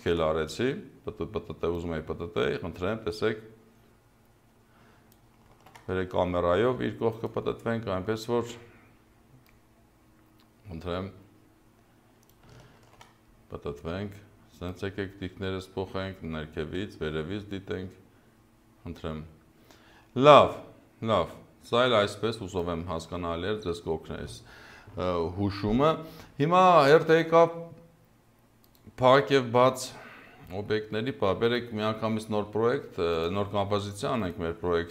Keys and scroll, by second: 5.5 ctrl+z, 12.8 ctrl+z.